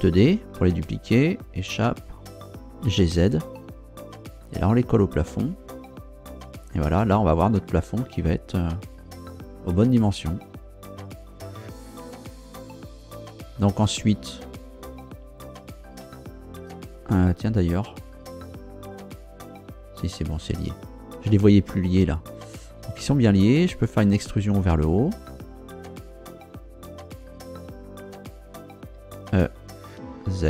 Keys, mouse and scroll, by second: 0.2 shift+d, 1.6 Escape, 2.8 g, 3.3 z, 11.8 click, 15.4 right click, 16.1 shift+right click, 18.8-19.2 scroll up 2, 19.9 scroll down 2, 21.2 scroll down 2, 22.3 scroll up 2, 23.0 scroll down 2, 28.9 e, 30.2 z.